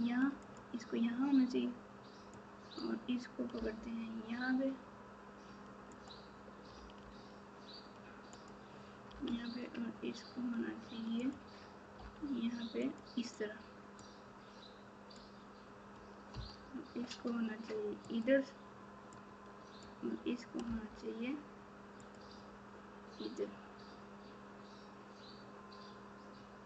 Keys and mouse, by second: 2.4 click, 5.9 g, 6.7 r, 9.0 g, 11.9 r, 14.3 click, 19.2 click.